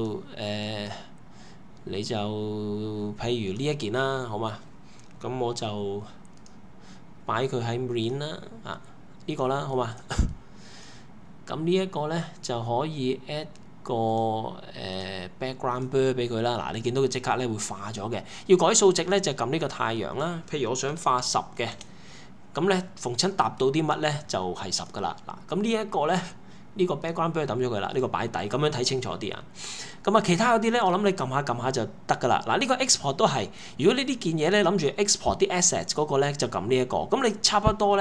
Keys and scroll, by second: 20.6-21.7 typing, 21.7 Return.